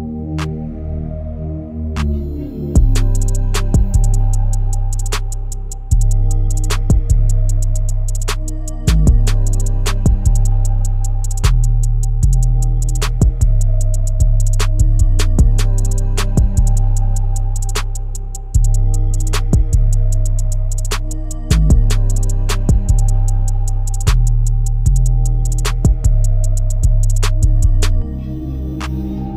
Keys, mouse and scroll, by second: 0.8-6.1 drag, 6.1 scroll down 4, 6.4 shift+middle click, 6.8-7.6 scroll up 1, 8.9 scroll up 1, 10.2 scroll down 1, 13.1 scroll up 1, 14.8-15.4 scroll down 4, 16.2 KP_3, 17.1-18.1 scroll up 6, 18.1 middle click, 18.5-18.9 scroll down 1, 18.9-20.4 middle drag, 20.4-21.3 scroll up 1, 21.3-21.9 scroll down 2, 21.9 middle click, 22.1 click, 23.9-25.2 drag, 25.2-25.9 scroll up 5, 25.9-28.4 middle drag, 28.4-29.1 scroll down 1, 29.1 KP_0.